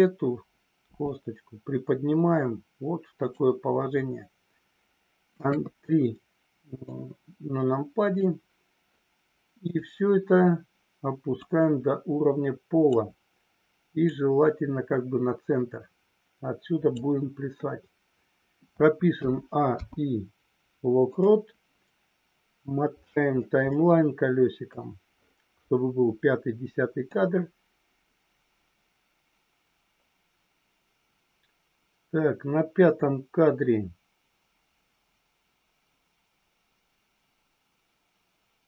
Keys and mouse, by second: 1.0 g, 5.5 KP_3, 7.0-8.2 drag, 9.6 click, 11.3-12.8 drag, 14.1-17.0 drag, 19.7 i, 23.6-24.6 middle drag, 27.1-38.6 drag.